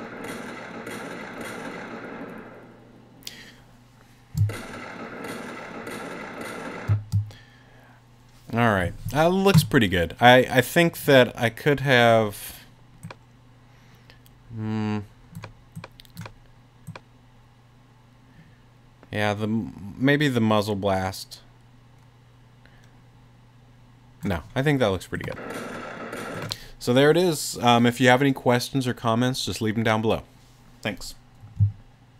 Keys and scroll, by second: 6.9 space.